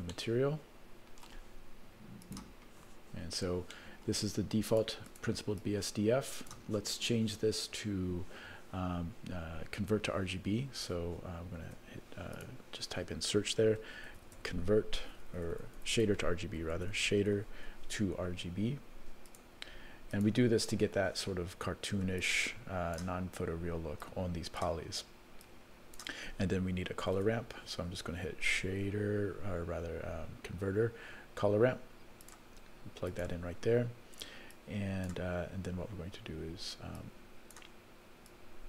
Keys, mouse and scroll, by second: 0.2-1.3 shift+middle drag, 2.2 click, 3.2-3.7 scroll down 2, 3.7 middle click, 3.7-4.1 scroll down 3, 4.7 click, 5.1 click, 5.6 click, 7.9-8.5 scroll up 1, 11.7 shift+a, 15.3 BackSpace, 15.4 BackSpace, 15.9 BackSpace, 22.2 click, 24.0 click, 25.4 click, 27.2 shift+a, 34.5 click, 37.0 click, 38.3 click.